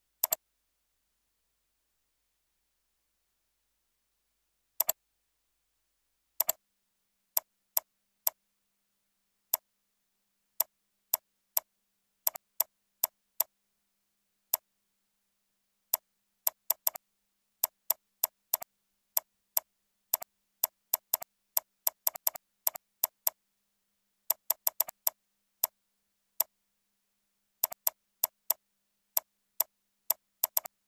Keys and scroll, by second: 16.3 ctrl+z, 29.8 ctrl+z, 30.2 ctrl+a.